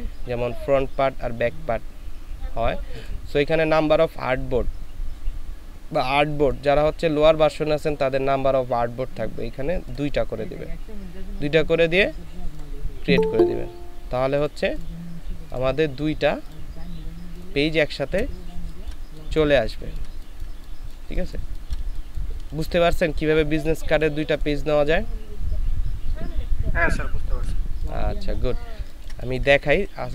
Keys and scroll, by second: 18.5 ctrl+space, 28.6 ctrl+space.